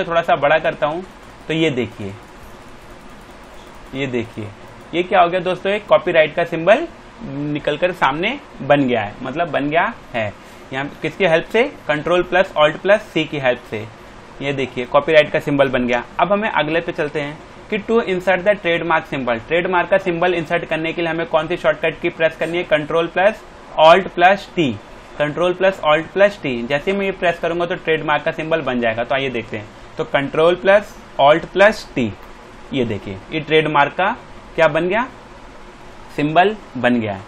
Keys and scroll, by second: 10.9 alt+Tab, 13.4 alt+Tab, 15.8 Return, 16.1 alt+Tab, 16.7 space, 28.6 alt+Tab, 32.0 t.